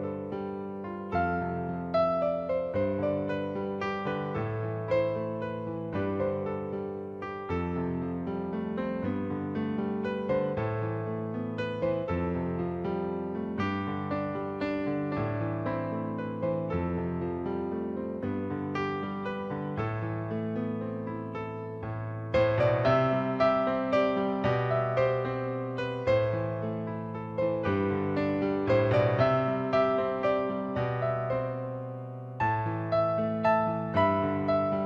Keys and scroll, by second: 22.8 ctrl+a, 23.6 ctrl+d, 24.3 ctrl+t, 26.2 Return.